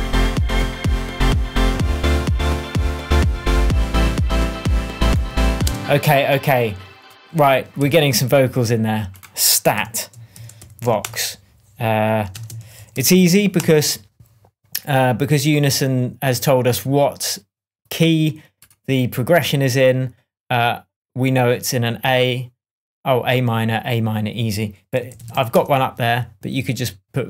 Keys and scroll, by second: 5.6 space, 7.7 super+t, 10.0 shift+super+r, 10.3-11.3 typing, 12.3 alt+space, 12.5-13.5 typing, 24.8-25.8 typing.